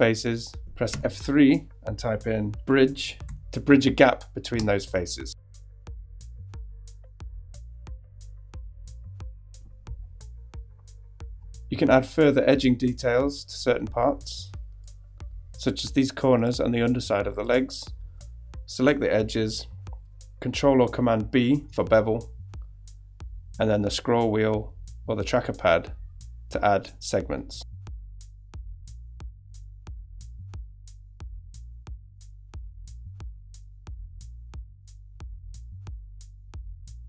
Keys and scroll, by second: 0.9 F3, 2.6-3.7 typing, 4.6 Return, 7.1 F3, 7.2 Return, 8.7 shift+F3, 9.2 Return, 20.0 super+b, 31.3 shift+e, 31.9 e, 34.7 super+b.